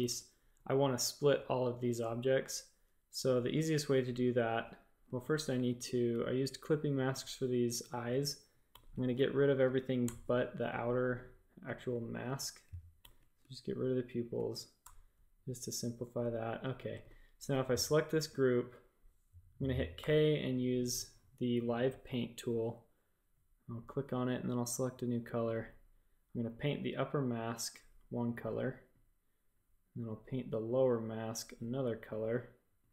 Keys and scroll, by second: 5.0 space, 5.5 a, 8.7 alt+super+7, 10.0 BackSpace, 12.9 alt+super+7, 14.8 BackSpace, 16.6 space, 16.9 v, 19.9 typing.